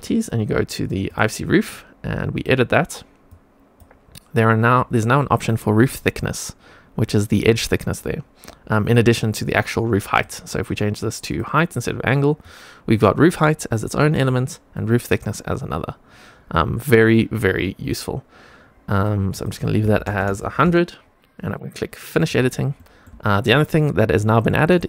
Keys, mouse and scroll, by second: 1.0 click, 2.2 click, 3.2 click, 5.5-8.4 drag, 10.0-11.3 drag, 12.3-14.2 drag, 14.6-18.9 drag, 19.3-20.6 drag, 20.2 KP_0, 22.2 click, 22.7 middle click, 23.2 shift+middle click, 23.7 middle click, 24.6 middle click.